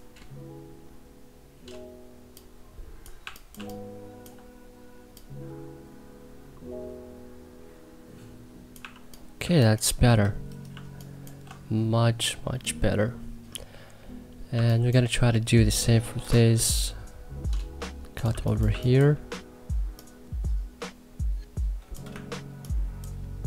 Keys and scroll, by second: 2.9 1, 3.3 3, 8.5 1, 9.1 3, 10.4 2, 14.3 2, 18.0 2, 18.4 1.